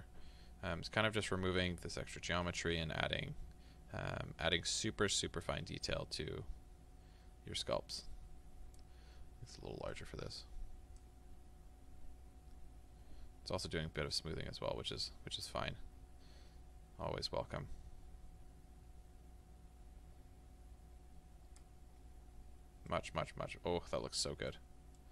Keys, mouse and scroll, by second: 21.9 scroll up 1, 22.3 scroll down 1, 22.9-25.1 middle drag.